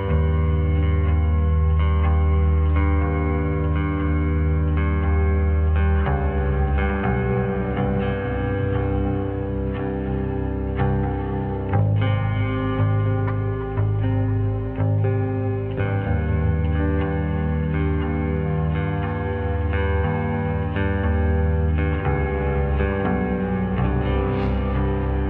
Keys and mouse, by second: 0.3 click, 1.1 r, 4.2-4.6 middle drag, 6.0 middle click, 6.8-7.2 shift+middle drag, 7.3 middle click, 8.7 shift+middle click, 9.1-10.3 middle drag, 11.5-13.4 middle drag, 14.3 middle click, 16.6 shift+middle click, 18.2 Tab, 18.8 right click, 19.2 middle click, 22.5 shift+d.